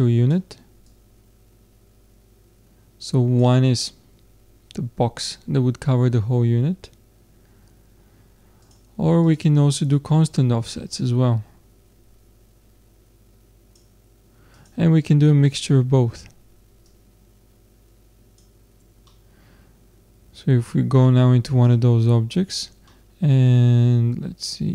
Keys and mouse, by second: 0.9 click, 1.8-2.8 drag, 5.9-8.7 middle drag, 8.7-12.3 drag, 14.6-16.3 drag, 16.8-19.1 drag, 19.5-20.7 middle drag, 20.7 Tab, 21.5-23.4 middle drag, 23.1 click, 23.6 middle click, 23.8 middle click.